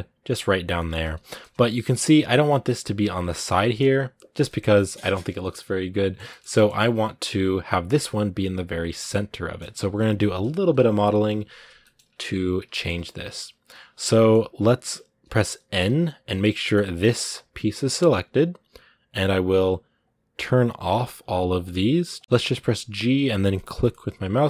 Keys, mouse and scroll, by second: 0.8 scroll up 1, 1.1 shift+middle click, 1.3 scroll down 2, 1.4 middle click, 1.8-2.6 scroll up 2, 2.6-4.2 scroll up 1, 4.2-5.3 middle drag, 5.3 scroll down 1, 5.4-6.5 middle drag, 6.5 scroll up 2, 8.9 middle click, 9.7-10.3 scroll up 1, 10.3 KP_1, 11.6-12.8 shift+middle drag, 12.8-13.9 scroll up 1, 13.9-15.5 shift+middle drag, 15.5 n, 16.3 middle click, 17.0-17.8 scroll down 1, 19.8-22.2 drag, 22.2 g.